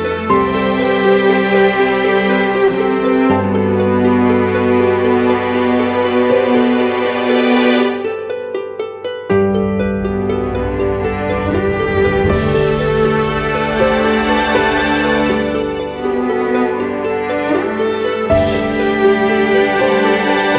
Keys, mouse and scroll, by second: 2.9 double click, 6.4 double click, 7.6-8.3 typing, 8.6 double click, 9.1 click, 13.1-13.6 typing, 13.8 double click.